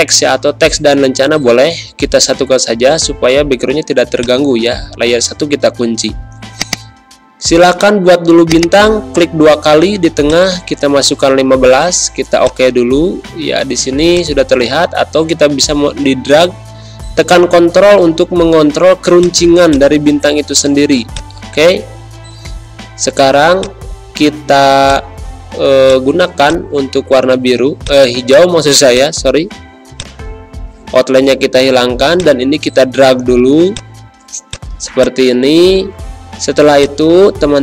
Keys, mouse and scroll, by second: 0.0-1.1 typing, 3.4 z, 4.1 click, 4.9 space, 5.1 click, 5.3 space, 6.6-12.3 drag, 13.4 ctrl+z, 14.1-19.1 drag, 21.8 Pause, 23.5-33.7 drag, 34.1 z, 34.4 click, 34.7 space, 34.9 click, 35.4 v, 36.7-37.6 shift+drag.